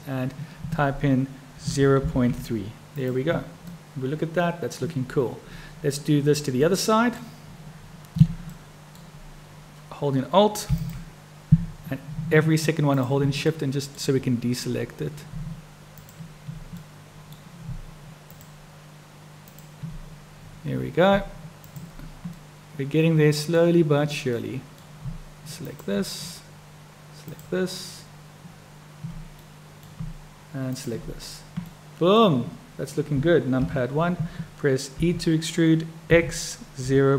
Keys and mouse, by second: 3.8-4.9 middle drag, 6.7 middle click, 8.6 middle click, 10.7 alt+click, 12.9 shift+click, 13.5 middle click, 16.8 middle click, 18.4 shift+click, 19.4 shift+click, 21.6 shift+click, 22.4-23.6 middle drag, 24.4 middle click, 25.6-27.0 shift+drag, 27.1 shift+click, 29.4 click, 30.6 shift+click, 31.7 click, 33.6 KP_1, 35.0 e.